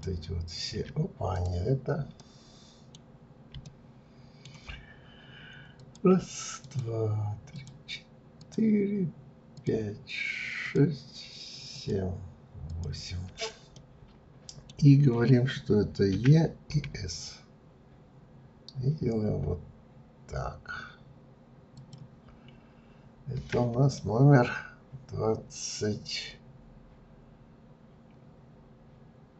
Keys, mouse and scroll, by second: 1.4 click, 2.2-3.2 middle drag, 3.2-3.6 scroll up 1, 3.6-5.7 shift+middle drag, 5.7 click, 6.6 shift+click, 7.5 shift+click, 8.4 shift+click, 9.5 shift+click, 10.6 shift+click, 11.7 shift+click, 12.7 shift+click, 13.8-16.1 middle drag, 16.1 e, 22.6-24.0 scroll down 3, 24.0-27.0 shift+middle drag.